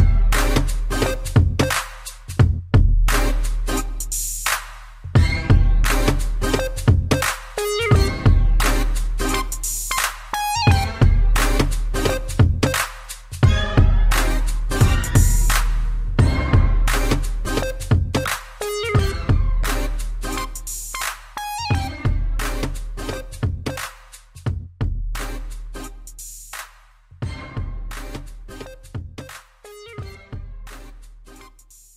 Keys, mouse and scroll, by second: 0.7 Down, 3.0 click, 3.4 scroll up 3, 3.9 s, 5.2 click, 5.3 click, 5.6 scroll down 2, 6.3 Up, 7.5-8.6 typing, 11.2 click, 12.1 Down, 12.5 Up, 14.5 Up, 15.7 Down, 16.1 ctrl+c, 16.8 Up, 17.2 ctrl+v, 18.7 middle click, 19.6 Down, 20.1 Up, 20.4 Up, 21.5 Down, 24.0 shift+middle click, 24.2 middle click, 24.4 ctrl+s, 24.7 scroll up 2, 25.3 scroll down 1, 26.9 click, 27.0 click, 27.4 scroll up 1, 27.9 middle click, 29.7 c, 30.1 click, 31.6 click, 31.7 click, 31.8 click.